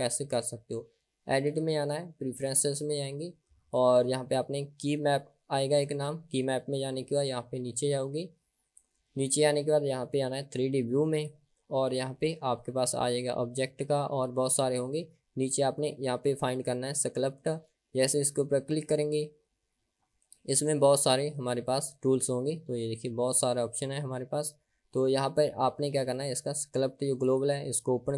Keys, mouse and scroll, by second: 1.6-3.1 drag.